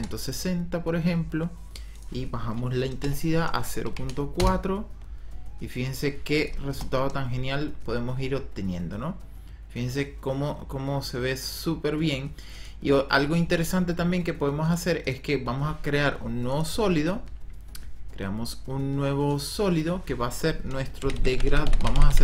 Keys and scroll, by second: 2.8 KP_0, 3.1 ,, 3.8 KP_4, 4.3 Return, 6.6 KP_0, 20.7-22.2 typing.